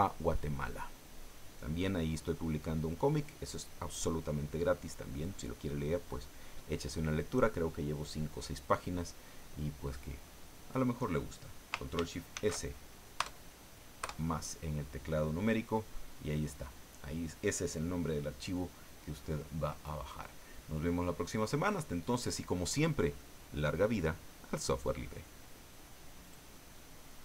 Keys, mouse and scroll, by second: 12.3 ctrl+shift+s, 13.2 KP_Add, 14.0 KP_Enter, 26.2 click.